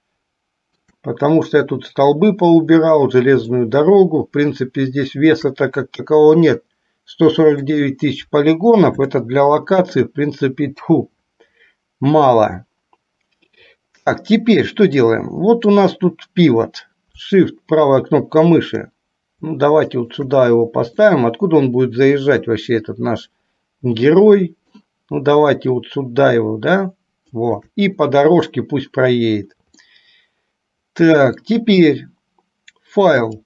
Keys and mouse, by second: 4.0-5.8 shift+middle drag, 7.9-9.0 middle drag, 9.6 shift+middle click, 15.2-16.0 middle drag, 20.1 shift+right click, 21.4-25.1 middle drag, 27.6 shift+right click, 30.1-31.7 middle drag, 33.3-33.4 drag.